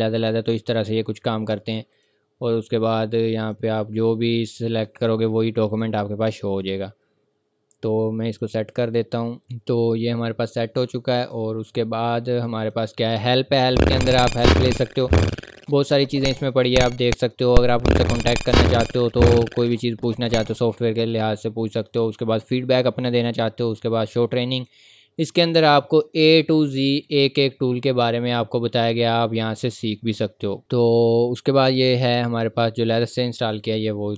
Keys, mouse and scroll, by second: 1.9 click, 4.2-4.8 scroll up 1, 5.7 click, 8.3 click, 24.6 click, 27.4-27.9 scroll down 1, 29.3-29.9 scroll up 1, 30.6 click.